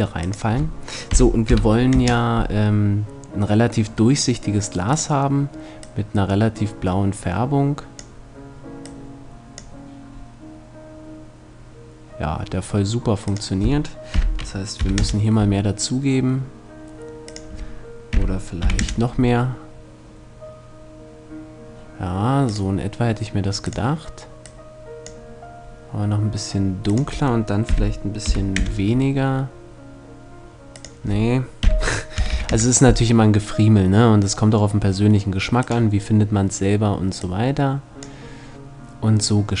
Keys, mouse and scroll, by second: 4.5 click, 17.0-18.6 drag, 22.4-23.5 drag, 26.8-28.3 drag, 30.4-32.1 drag, 35.2-36.8 drag.